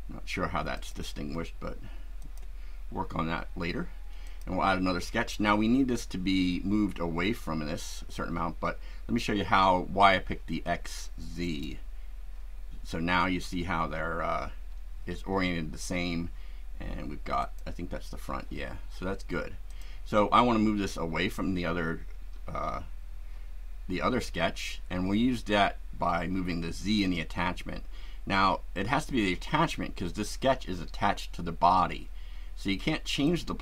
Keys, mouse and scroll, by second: 0.7 click, 2.2 click, 4.2 click, 11.5 click, 17.4 click, 19.7 click, 26.8 click, 33.3 click.